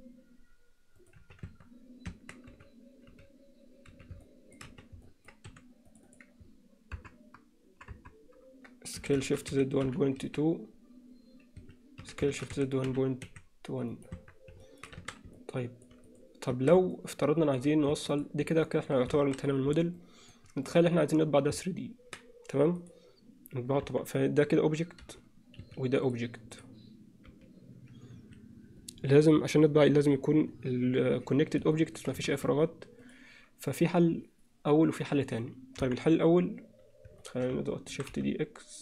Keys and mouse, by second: 1.2 z, 1.6 Tab, 2.2 Tab, 2.5 z, 3.1 z, 3.9 z, 4.2 middle click, 5.1 alt+z, 5.1 alt+middle click, 5.6 3, 6.0 click, 7.0 ctrl+KP_Add, 8.0 ctrl+KP_Add, 9.0 s, 12.5 s, 14.2 Tab, 14.6 middle click, 15.0 alt+a, 15.4-15.9 middle drag, 16.6 Tab, 17.0 middle click, 18.0 Tab, 18.7 alt+middle click, 19.2 alt+a, 20.0-20.4 alt+middle drag, 20.7 click, 22.8 click, 23.8 KP_1, 25.0 g, 26.1 click, 26.6 click, 27.3 g, 31.8 middle click, 32.3 alt+a, 35.8 KP_1.